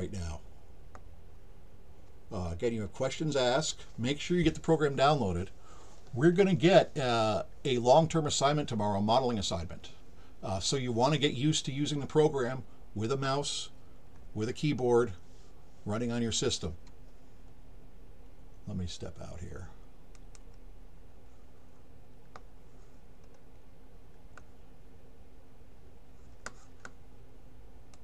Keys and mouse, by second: 20.1 click, 27.9 click.